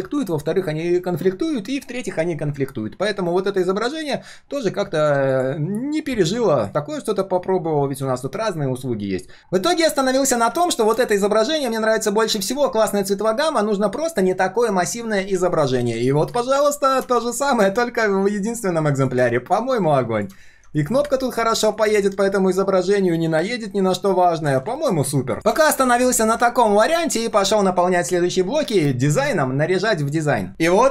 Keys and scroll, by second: 15.9 ctrl+v, 17.2 ctrl+shift+z, 24.6 ctrl+z.